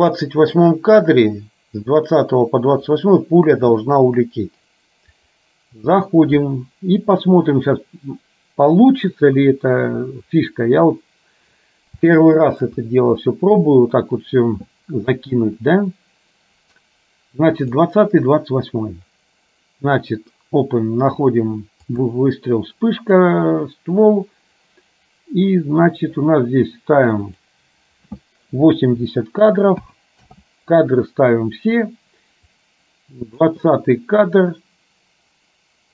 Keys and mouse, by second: 5.2-10.6 drag, 12.2 shift+middle click, 17.8-23.5 drag, 27.3-30.3 drag, 32.6 click.